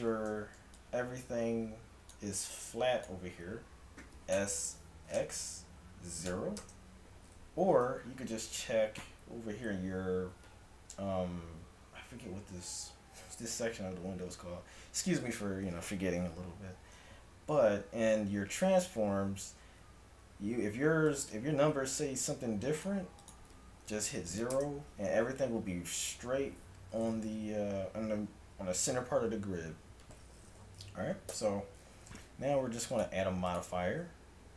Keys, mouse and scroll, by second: 0.3 a, 4.4 s, 7.6 n, 21.2-25.3 drag, 31.3 n, 33.0-34.5 drag.